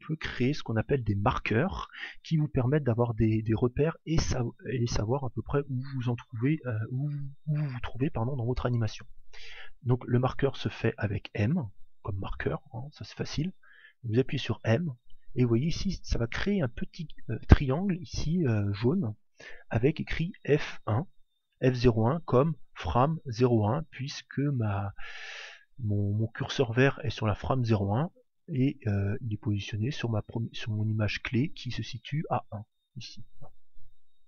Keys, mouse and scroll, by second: 14.4 m, 26.0 click.